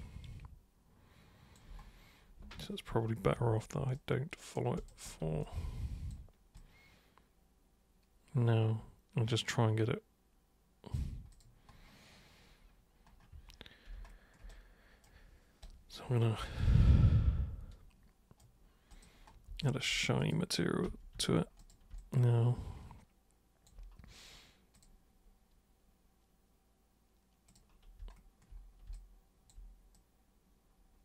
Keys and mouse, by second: 3.3 super+3, 4.0 super+right click, 4.8 super+click, 5.4 alt+super+click, 6.6-10.9 alt+super+drag, 11.3 super+click, 13.4 super+1, 14.5 super+right click, 15.6-18.4 super+right drag, 18.9 super+click, 19.7 alt+super+click, 20.2 super+click, 20.9 super+2, 21.2 super+3, 21.6 super+click, 22.0-23.7 alt+super+drag, 24.8 super+click, 27.5 super+click, 29.0 alt+super+click, 30.0-31.0 super+drag.